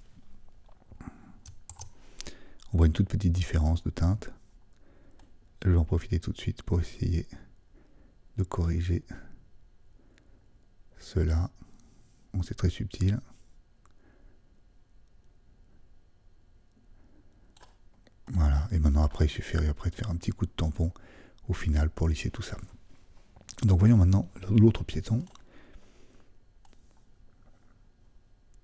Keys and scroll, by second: 1.7 super+m.